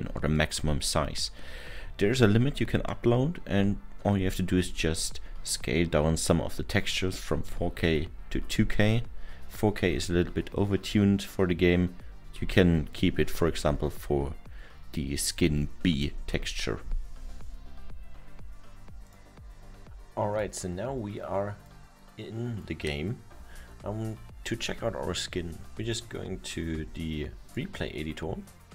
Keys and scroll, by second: 26.8 Escape.